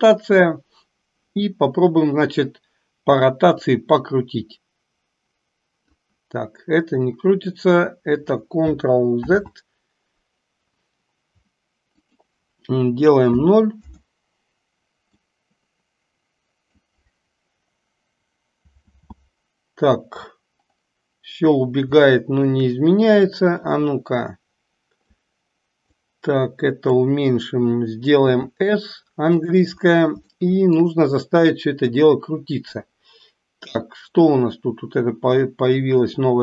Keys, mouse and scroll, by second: 3.7-6.0 drag, 9.3 ctrl+z, 12.0-13.9 drag, 15.2-16.8 drag, 18.9 ctrl+z, 22.1-22.7 shift+middle drag, 23.3-25.2 drag, 25.8-27.2 drag, 28.3 s, 30.4 shift+middle click.